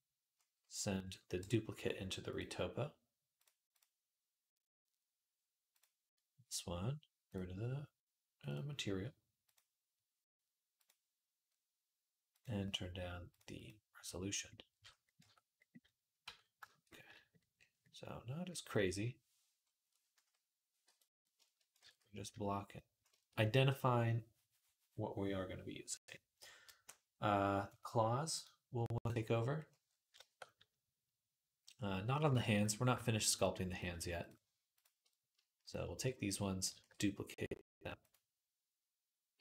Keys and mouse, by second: 1.2 m, 3.3-7.2 drag, 7.2-8.3 middle drag, 8.3 click, 8.4 middle click, 9.3-12.2 drag, 12.2 middle click, 13.1-28.2 drag, 15.0 Tab, 16.0 Tab, 20.6 t, 22.1 ctrl+s, 28.2 middle click, 29.1 click, 29.2-33.5 middle drag, 33.5 click, 33.6 shift+middle click, 34.6 shift+click, 34.7 shift+middle click, 35.5 shift+click, 35.6-39.4 shift+middle drag, 36.5 shift+d, 39.1 m.